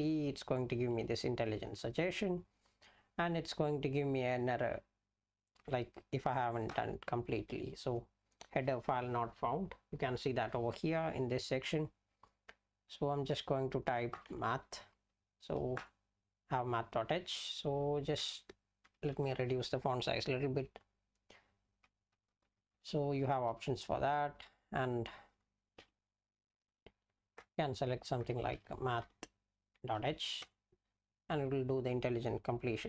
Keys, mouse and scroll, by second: 0.0-0.4 typing, 6.7 Return, 13.9-15.0 typing, 15.8 Return, 18.8 ctrl+-, 22.1-23.5 typing, 24.7 BackSpace, 25.8 e, 26.9 Down, 27.4 Return, 28.3-29.5 typing, 30.4 Return.